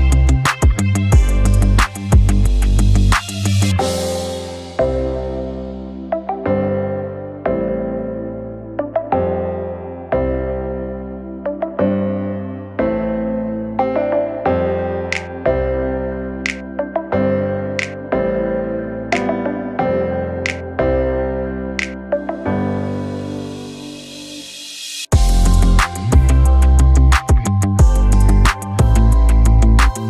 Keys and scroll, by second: 4.3 v, 10.7 v.